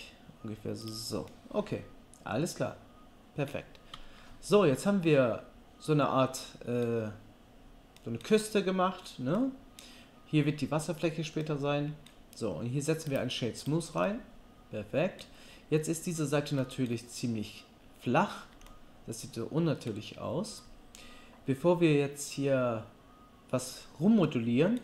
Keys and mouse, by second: 3.9 Tab, 13.2-19.2 right drag.